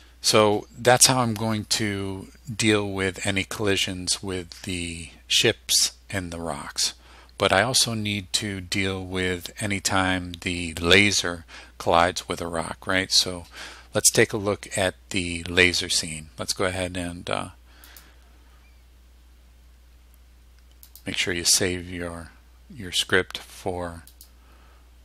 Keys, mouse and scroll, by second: 18.0 click, 21.0 click, 24.2 click.